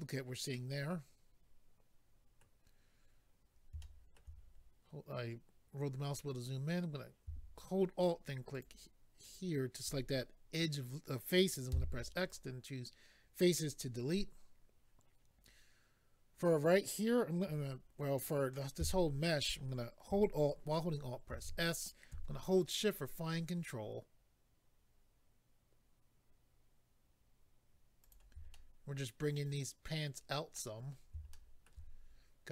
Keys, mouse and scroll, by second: 0.5 middle click, 3.8 shift+middle click, 4.4-5.1 scroll up 4, 8.5 alt+click, 9.2 alt+click, 12.3 click, 12.3 x, 13.6 scroll down 2, 13.6 click, 14.4-14.8 scroll down 2, 28.0 shift+click, 28.5 middle click, 30.8-31.3 scroll up 2, 31.3 shift+middle click, 32.0-32.5 scroll up 3.